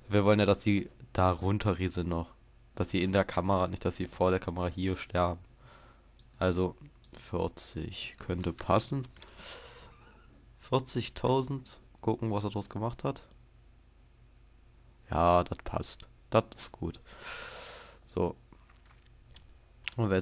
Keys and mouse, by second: 19.3 middle click.